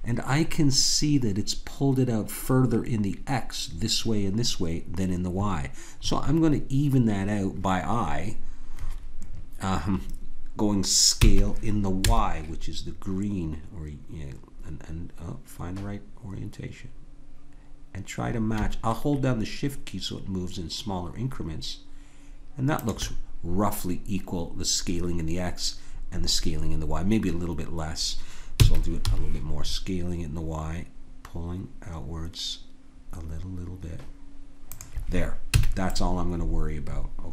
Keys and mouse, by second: 11.2 s, 28.6 s, 35.5 a, 36.1-37.3 middle drag.